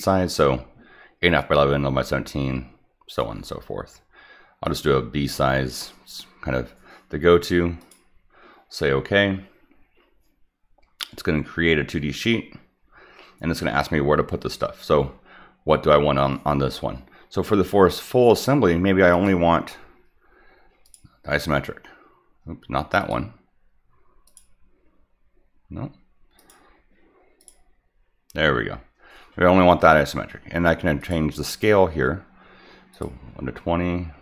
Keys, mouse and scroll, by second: 4.6 click, 7.8 click, 19.1 click, 20.8 click, 23.0 click, 24.3 click, 26.4 click, 27.4 click, 31.0 click, 32.9 click.